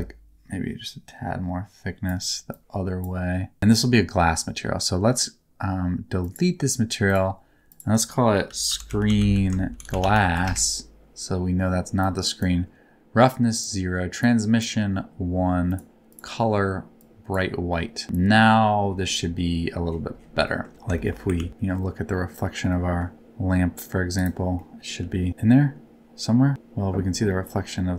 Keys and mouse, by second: 2.5 middle click, 7.0 middle click, 7.8-10.4 middle drag, 9.1 e, 10.1 shift+s, 12.0 click, 13.5 click, 14.2 click, 15.6 click, 16.0 click, 17.8 middle click, 20.4 middle click, 20.9 shift+middle click, 21.3 ctrl+s, 21.5 middle click, 22.7 middle click, 23.1 g, 24.1 click, 24.5 middle click, 25.0 g, 25.3-26.5 middle drag, 27.4 middle click.